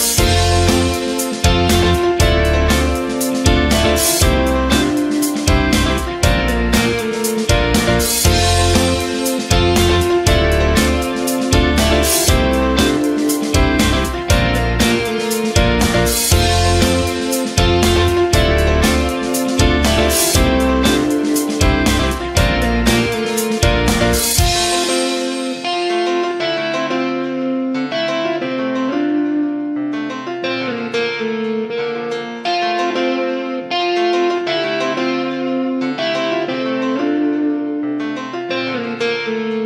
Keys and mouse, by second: 0.0 g, 1.4 c, 2.2 g, 4.8 Tab, 6.1 alt+z, 7.8-8.6 drag, 8.9 middle click, 9.9 g, 13.4 shift+middle click, 13.9 Tab, 14.3 a, 14.7 g, 15.9 r, 16.7 g, 17.7 r, 18.5 s, 19.1 shift+middle click, 20.2 right click, 20.4 g, 21.7 alt+z, 22.0 c, 23.0 g, 25.1 r, 25.9 alt+z, 26.1 shift+middle click, 26.9 Tab, 27.3 Tab, 27.9 g, 28.7 alt+z, 29.1 c, 29.7 g, 31.7 a, 32.2 r, 33.0 alt+z, 33.5 g, 35.7-39.6 typing.